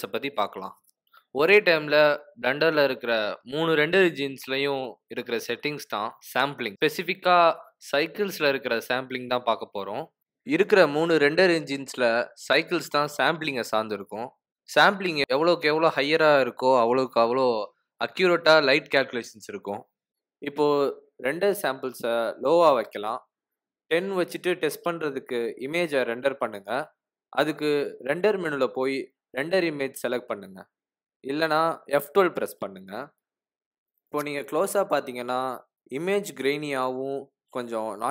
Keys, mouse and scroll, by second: 0.2 s, 1.7 Tab, 4.1 click, 5.6 click, 19.1 click, 20.9 click, 23.5 click, 24.4 click, 28.2 click.